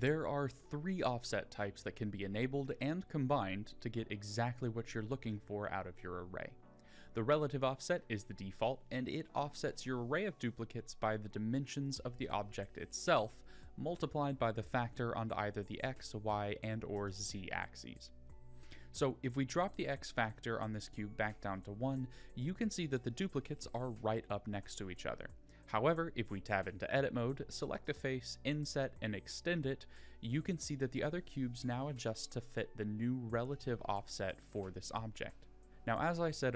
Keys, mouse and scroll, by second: 15.2-15.6 middle drag, 16.1 middle click, 18.6 middle drag, 19.8 middle click, 22.3 click, 22.7 click, 23.3 middle click, 25.9 middle click, 27.4 Tab, 28.3 click, 30.0 i, 31.9 middle click, 32.9 middle click, 35.6 click.